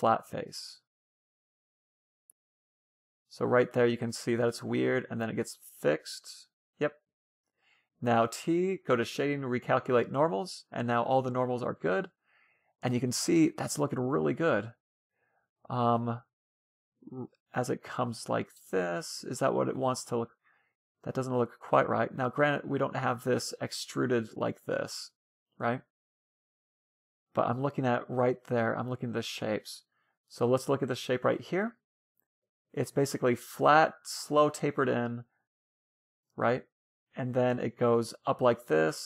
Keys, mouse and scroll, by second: 0.1 f, 1.4 f, 3.2 f, 4.7 f, 6.2 a, 6.3 a, 9.3-11.0 drag, 10.8 Tab, 11.0-12.6 middle drag, 13.0-15.5 middle drag, 16.0-19.4 middle drag, 20.1-20.8 scroll up 1, 20.8 Tab, 20.8 scroll up 1, 21.0 middle click, 21.9-24.0 right drag, 23.2 e, 24.0 right click, 24.1 Tab, 24.4-26.0 middle drag, 26.2-27.7 middle drag, 28.7 scroll up 1, 28.9-33.1 middle drag.